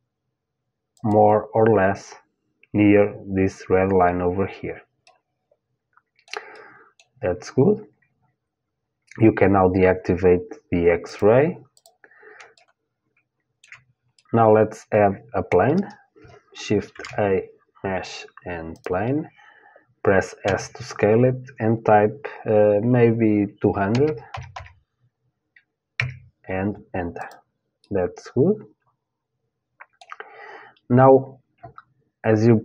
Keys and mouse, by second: 4.7-9.8 middle drag, 10.7-13.3 drag, 13.3-15.8 middle drag, 16.5 shift+a, 20.1 s, 26.8-28.8 drag, 28.8 middle click, 30.9-32.6 middle drag.